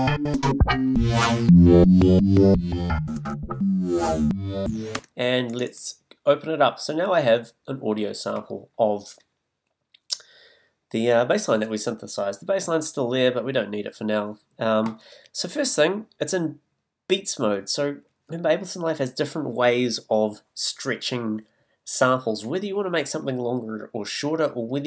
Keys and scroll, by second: 4.9 space.